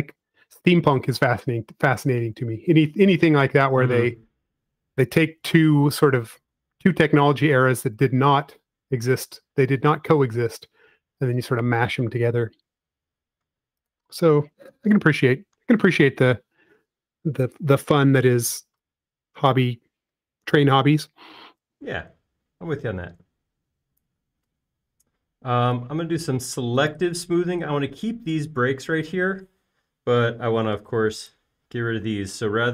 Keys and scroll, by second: 0.9-1.6 typing, 3.5 BackSpace, 31.2 e.